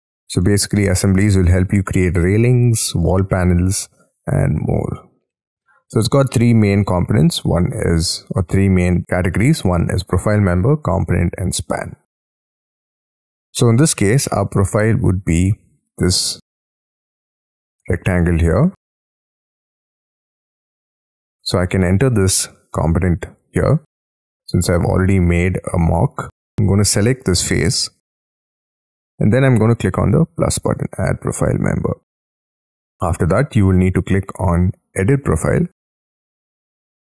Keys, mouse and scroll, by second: 0.4 middle click, 1.0 scroll down 7, 12.3 scroll up 22, 12.6 middle click, 13.4 scroll down 5, 13.5-14.4 scroll up 13, 14.4 middle click, 17.1 double click, 17.5 double click, 18.5 double click, 18.9 double click, 20.1 double click, 21.1 scroll down 6, 21.5-23.7 scroll up 9, 23.7-24.6 scroll down 13, 24.6 middle click, 26.4-27.2 scroll up 11, 27.2 double click, 27.9-33.0 scroll down 5.